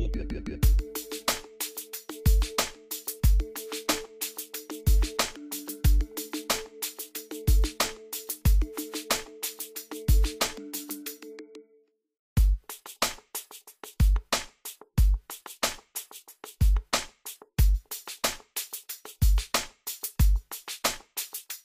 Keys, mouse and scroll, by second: 2.7-3.1 scroll up 1, 3.5 click, 3.9-4.2 scroll down 1, 4.7 scroll up 1, 5.1 scroll down 1, 7.4 click, 8.6 scroll down 1, 10.1 click, 13.2 click, 16.3 click, 18.7-19.0 scroll up 1, 19.0 scroll down 1, 19.3-19.7 scroll up 1, 19.8 scroll up 1, 19.9-20.5 scroll down 1.